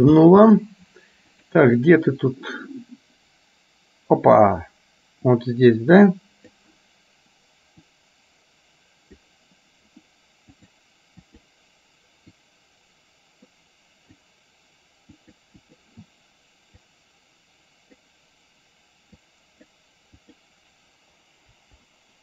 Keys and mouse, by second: 0.2 space, 1.6 click, 1.9-4.7 drag, 5.6-6.8 drag, 7.9-9.3 drag, 10.7 click, 11.3 click, 12.6-14.3 drag, 15.3 click, 15.7 click, 16.9-18.2 drag, 19.3 click, 20.3 click, 21.6 Delete.